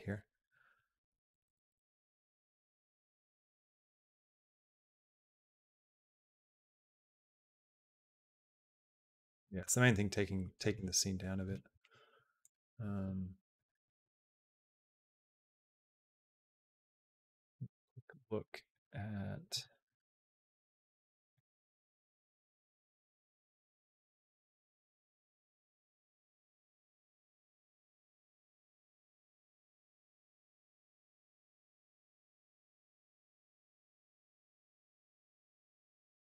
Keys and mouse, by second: 12.2-13.8 drag, 15.0 click, 16.5-30.6 drag, 31.4 click, 31.9 space.